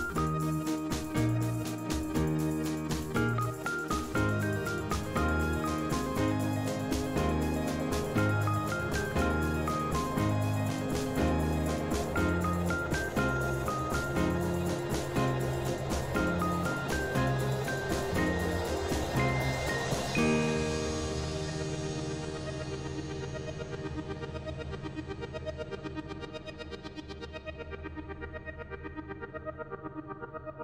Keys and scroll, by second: 1.2 ctrl+z, 3.3 l, 8.8 typing, 10.1 typing, 30.4 l.